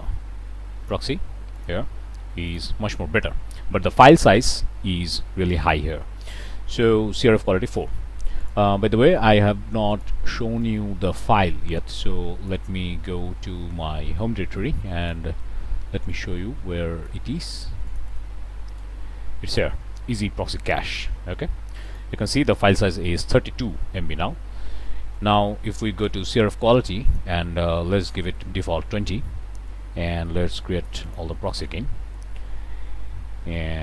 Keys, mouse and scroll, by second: 0.7 click, 1.5 click, 2.4 click, 8.4 click, 9.0 click, 9.8 click, 10.5-12.6 drag, 15.0 click, 16.0-17.2 drag, 17.8 click, 18.7 click, 20.6 click, 21.8 click, 27.0 click, 27.9 2, 27.9 0, 31.0 click.